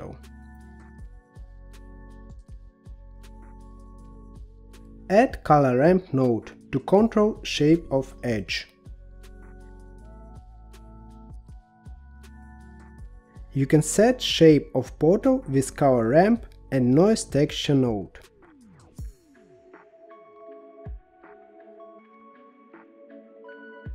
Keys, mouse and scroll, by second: 0.4 middle click, 1.4-2.4 drag, 2.4 g, 4.8 shift+a, 9.2 middle click, 9.7-11.0 scroll up 9, 11.3 middle click, 11.9-13.0 scroll up 1, 13.0-16.0 drag, 19.2-19.7 scroll down 3, 19.7-21.8 middle drag, 22.3-22.8 scroll up 2, 22.8-23.9 middle drag.